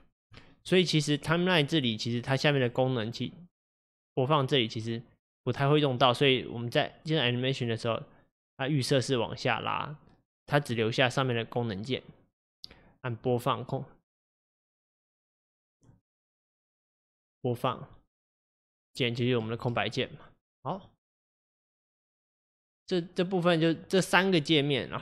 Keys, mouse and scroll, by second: 20.8-25.0 middle drag.